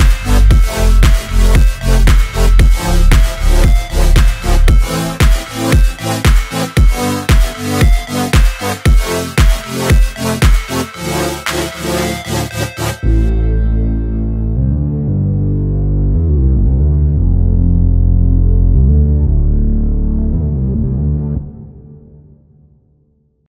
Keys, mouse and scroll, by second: 2.7 click, 2.9 space, 5.1 click.